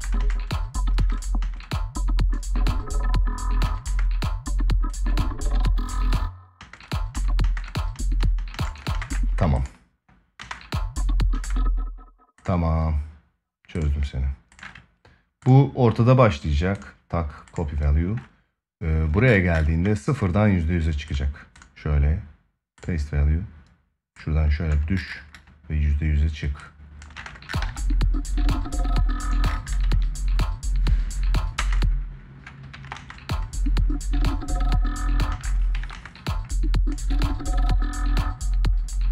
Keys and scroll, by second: 3.4 space, 5.7 space, 10.1 space, 26.9 space, 29.6 ctrl+s, 32.5 space, 32.5 ctrl+s, 32.7 space, 35.1 space, 35.5 ctrl+s, 35.7 space.